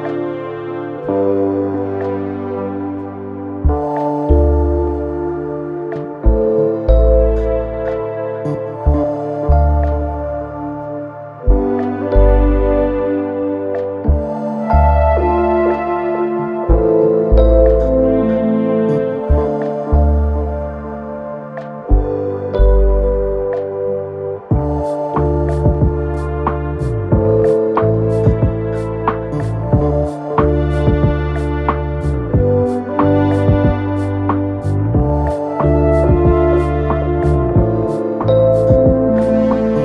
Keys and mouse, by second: 0.6 ctrl+z, 2.1-5.6 drag, 5.2 r, 5.6-8.2 middle drag, 6.4 r, 7.3 g, 8.2-9.9 drag, 9.5 r, 9.9-10.9 middle drag, 10.0 g, 10.9-13.6 drag, 12.1 g, 13.6-39.8 middle drag, 15.5 g, 17.0 r, 18.6 x, 20.3 click, 20.8 shift+d, 21.8 KP_1, 21.8 KP_3, 22.6 z, 23.6 r, 24.0 g, 25.2-28.0 typing, 29.1 r, 29.5 g, 30.4 s, 31.9 g, 32.8 s, 34.2 r, 35.5-39.8 drag.